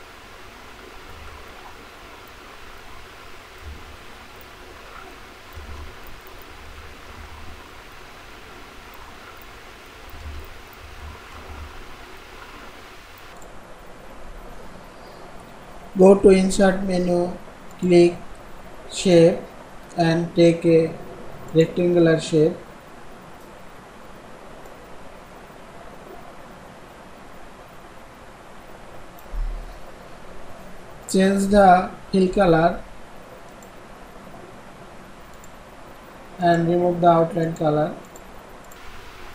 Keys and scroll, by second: 5.5 ctrl+c, 6.4 ctrl+a, 7.1 ctrl+v, 10.1 ctrl+c, 10.8 ctrl+a, 11.3 ctrl+v, 12.2 ctrl+v.